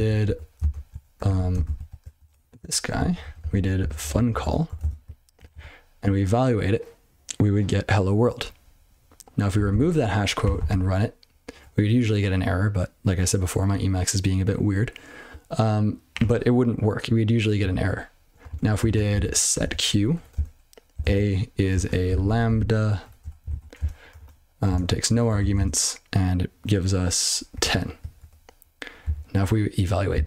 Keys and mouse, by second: 0.2 ctrl+f, 0.6 ctrl+alt+space, 1.2 ctrl+g, 1.5 ctrl+space, 1.6 ctrl+e, 2.2 (, 2.7 ctrl+a, 2.9 ctrl+f, 3.2 ctrl+f, 3.4 ctrl+f, 3.7-4.9 typing, 5.5 ctrl+c, 9.5 ctrl+d, 9.7 ctrl+d, 10.5 ctrl+c, 18.5 ctrl+shift+o, 18.6-25.5 typing, 23.5 alt+/, 25.4 ctrl+f, 27.3-28.1 typing, 28.2 ctrl+g, 29.0 ctrl+n.